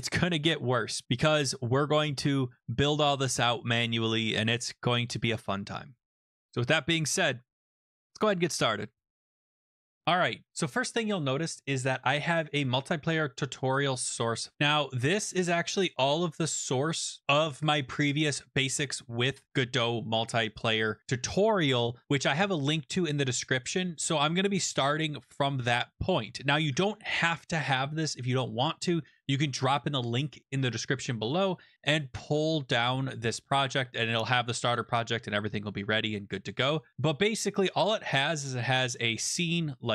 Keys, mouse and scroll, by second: 10.2 click, 12.1 click, 14.5 click, 14.9 click, 15.3-16.0 scroll down 7, 16.0-17.2 scroll, 37.6 click, 37.7 click, 38.9 scroll.